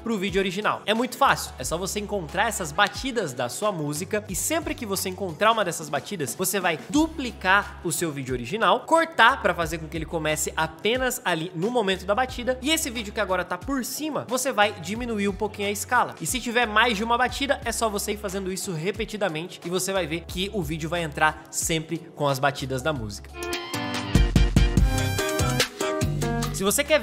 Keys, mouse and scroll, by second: 2.3 m, 13.7 space, 16.5-18.8 alt+drag, 22.3 alt+middle click, 23.3 space.